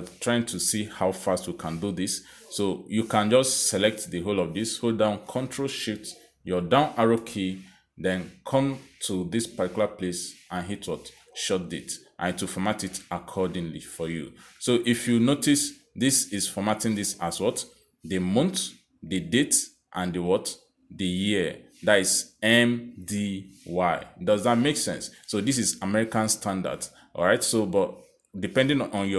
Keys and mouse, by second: 4.2 click, 5.6 click, 6.7 ctrl+shift+Down, 11.7 click, 13.3 click, 28.4 click.